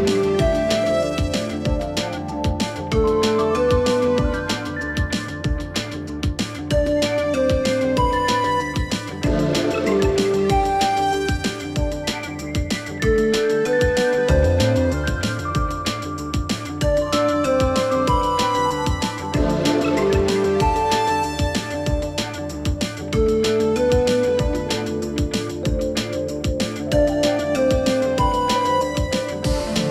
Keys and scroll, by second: 26.6 Escape, 27.0 s.